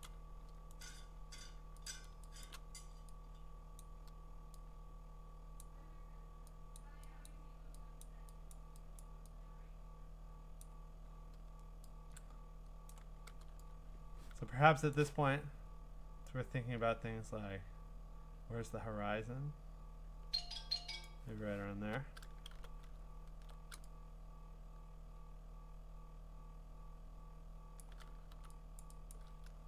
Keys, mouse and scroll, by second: 0.1 click, 0.8 right click, 1.9 click, 2.1 click, 2.4 click, 3.8 click, 5.6 click, 7.3 click, 8.0 click, 8.5 click, 9.0 click, 10.6 click, 12.9-14.9 click, 14.0 click, 14.8-18.0 drag, 21.0 click, 22.5 b, 23.0 middle click, 23.1 middle click, 25.5 scroll, 27.8 click, 28.3 x, 28.8 click, 29.1 click.